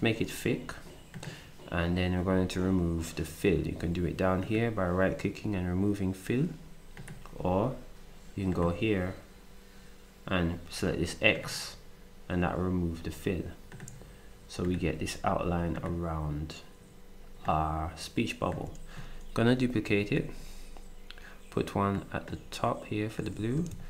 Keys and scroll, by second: 19.8 ctrl+d, 23.7 ctrl+d.